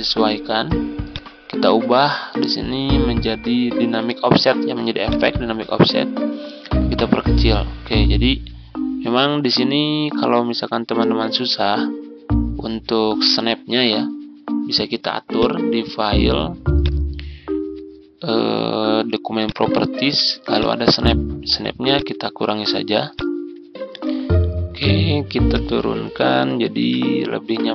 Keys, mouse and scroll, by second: 24.2 ctrl+scroll up 1, 25.4-27.7 drag.